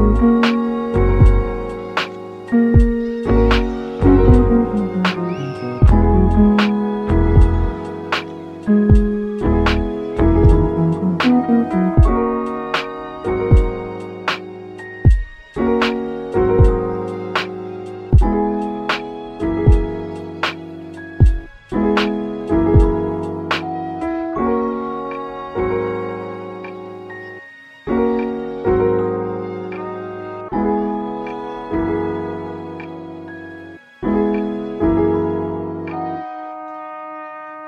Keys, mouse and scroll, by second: 0.9 click, 1.2 Tab, 1.5 scroll down 2, 1.6 middle click, 2.2 alt+z, 2.4 alt+middle click, 3.2 scroll up 2, 3.4 Tab, 4.0 click, 5.0 alt+z, 5.3 alt+click, 6.0 g, 8.3 click, 8.6 Tab, 9.2 scroll down 1, 9.3-11.3 middle drag, 11.3 scroll up 1, 11.5 Tab, 12.2 g, 13.6 click, 14.1 Tab, 14.5 scroll down 2, 14.6 middle click, 15.2 alt+z, 15.4-18.1 middle drag, 18.1 Tab, 18.4-18.9 scroll up 3, 18.9 shift+middle click, 19.3-19.8 scroll up 3, 19.8 shift+middle click, 20.2 alt+z, 20.4-21.2 middle drag, 21.2 KP_1, 22.4 click, 24.3 s, 26.2 s, 30.4 click, 30.9 g, 32.7 click, 33.4 g, 33.4 g, 34.7 shift+click, 35.0-35.3 scroll down 4, 35.4 middle click, 36.0 Tab, 36.5 middle click, 36.8 alt+z, 37.2 middle click, 37.5 click.